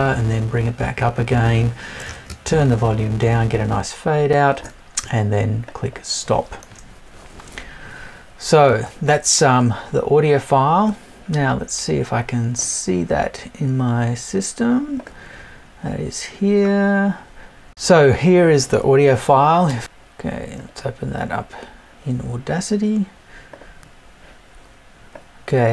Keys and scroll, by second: 8.7 super+Tab.